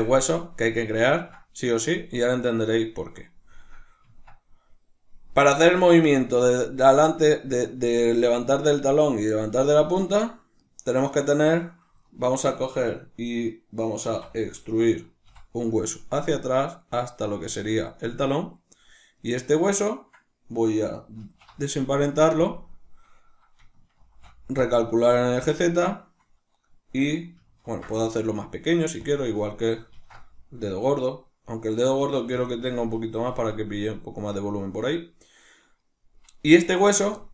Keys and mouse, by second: 4.0 Tab, 4.0-10.0 middle drag, 10.0 right click, 10.6 right click, 10.8 right click, 11.2 right click, 11.3 right click, 12.0-17.6 ctrl+middle drag, 14.1 e, 17.6 click, 19.2 right click, 21.2 alt+p, 27.6 ctrl+alt+s, 29.1 click, 29.4 right click, 32.4 click, 35.8 right click, 37.2-37.3 shift+middle drag.